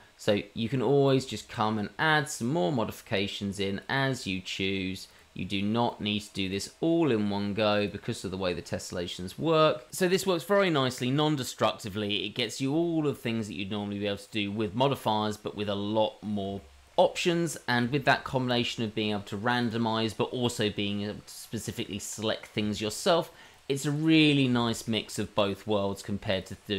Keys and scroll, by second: 1.0-5.2 typing, 5.6 shift+Tab, 6.7-9.5 typing, 9.7 Tab, 10.6 g, 10.8 g, 11.2 g, 11.9 ctrl+z, 12.3-15.3 typing, 15.3 Tab.